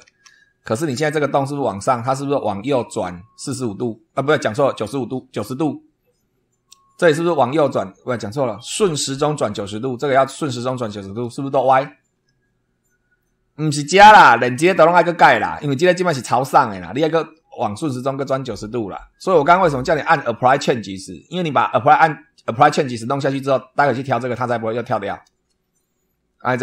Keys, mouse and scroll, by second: 0.0 super+2, 13.1 shift+click, 14.2-14.5 scroll up 2, 22.9 scroll down 2.